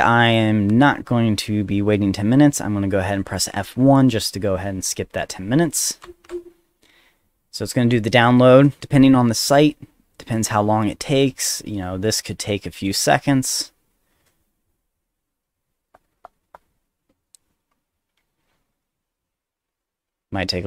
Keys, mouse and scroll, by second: 0.2 click, 6.0 F1.